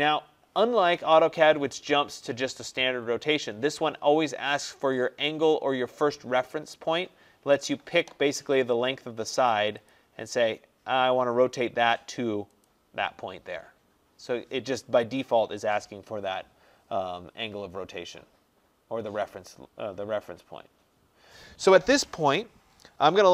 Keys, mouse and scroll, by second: 9.9-12.1 drag, 12.7 click, 16.0-16.7 scroll.